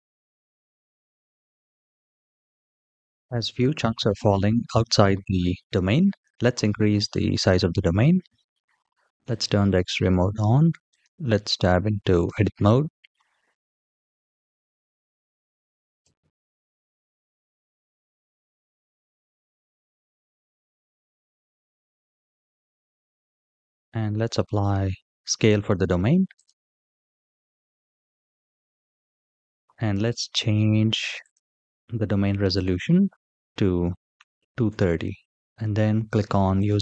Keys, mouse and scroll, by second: 9.1 click, 11.1 click, 13.2-14.5 drag, 15.8 g, 20.4-22.3 drag, 24.8 ctrl+a, 29.5-31.1 drag, 29.5-30.9 scroll down 6, 34.5 click.